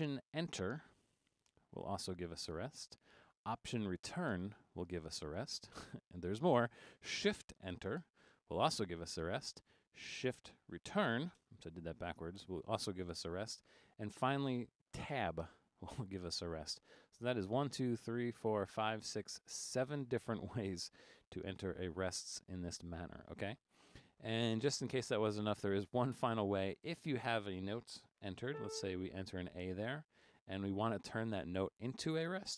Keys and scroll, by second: 1.5 alt+Return, 8.1 shift+Return, 15.5 Tab, 27.0 Up, 28.5 a.